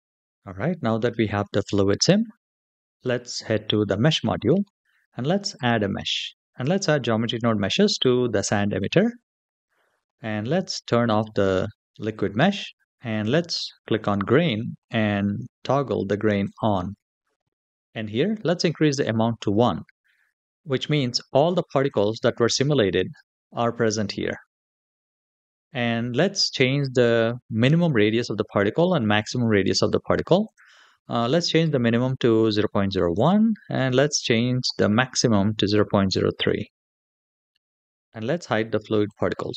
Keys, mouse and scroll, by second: 3.8 click, 5.3-8.9 drag, 10.9 click, 12.9 click, 16.2 click, 17.0-17.7 scroll down 2, 17.7 click, 20.7-21.8 drag, 29.4-30.2 scroll down 1, 30.2-33.1 drag, 34.3-36.3 drag, 37.7 click, 38.9 click.